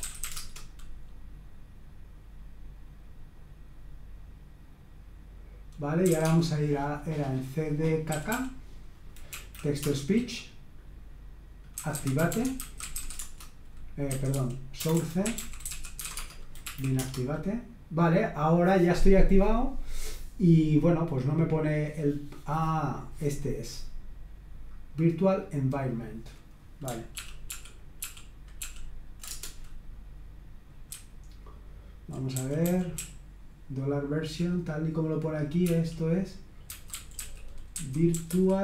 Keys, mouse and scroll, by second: 0.0-0.7 typing, 5.8-6.7 typing, 8.1-9.8 typing, 11.5-17.0 typing, 25.9 click, 27.2 ctrl+p, 27.5 ctrl+p, 28.0 ctrl+p, 28.6 ctrl+p, 29.3 Return, 30.9-34.5 typing, 35.6-38.6 typing.